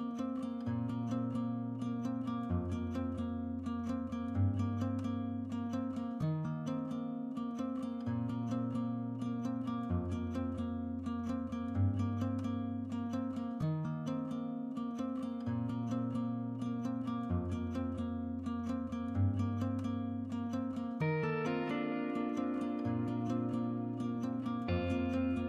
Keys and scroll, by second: 0.9 8, 6.5-11.1 Escape, 17.2 typing.